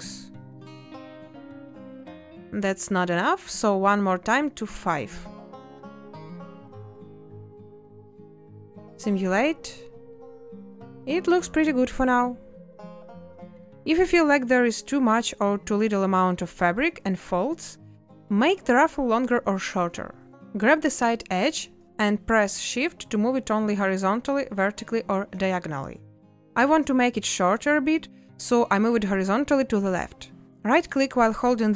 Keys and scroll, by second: 1.0 space, 4.0 space, 6.4 Return, 8.7 space, 14.0 space, 19.0 a, 20.6 z.